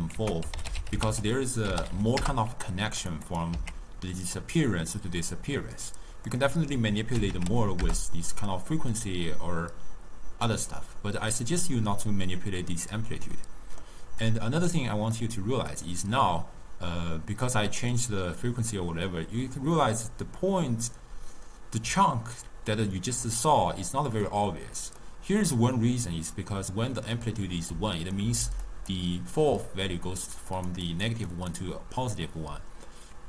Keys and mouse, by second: 0.2 ctrl+a, 2.0 l, 3.3 click, 4.0 x, 6.4-9.4 drag, 13.4-14.3 middle drag, 14.3 click, 15.2 click, 22.0-23.5 d, 23.9 d, 25.1-27.8 middle drag, 27.8-32.4 typing, 28.2 click, 28.7 click, 30.6 click, 31.0 click, 31.4 click.